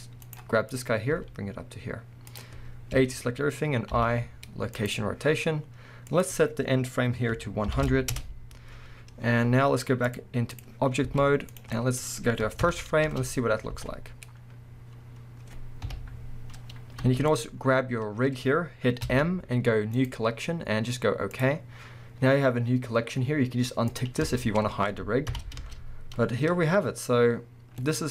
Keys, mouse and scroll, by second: 0.4 right click, 0.7 click, 1.1 g, 2.4 click, 2.9 a, 6.1-11.7 drag, 7.8 0, 8.2 Return, 9.2-9.6 scroll down 1, 11.1 z, 11.7-13.1 middle drag, 12.6 shift+Left, 13.0 space, 17.0 space, 17.3 click, 17.6 scroll up 1, 19.0 m, 23.9-27.8 drag, 24.3-25.3 scroll down 1, 25.3 shift+Left, 25.6 space, 27.4 scroll down 1.